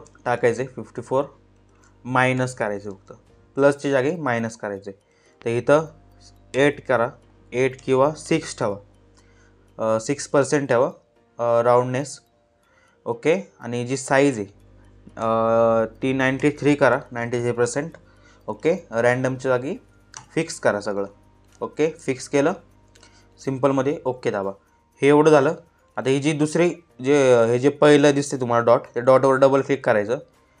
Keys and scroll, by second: 1.8 -, 6.0 8, 7.3 BackSpace, 7.8 6, 14.7 9, 15.9 3.